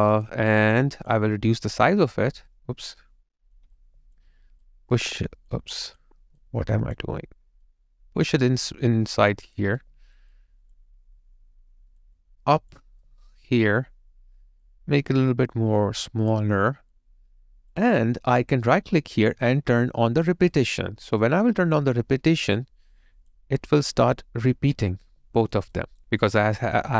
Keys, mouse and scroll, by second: 6.4 double click, 9.6 double click, 9.8 alt+right click, 10.3 alt+click, 13.0 alt+middle click, 18.7 right click, 25.1 alt+middle click, 25.7 alt+right click.